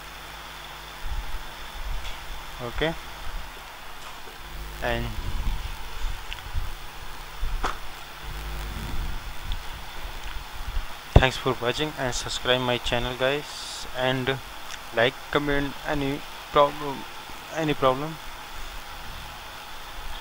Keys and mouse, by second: 0.0-5.6 drag, 7.7-18.9 middle drag, 18.9 Escape.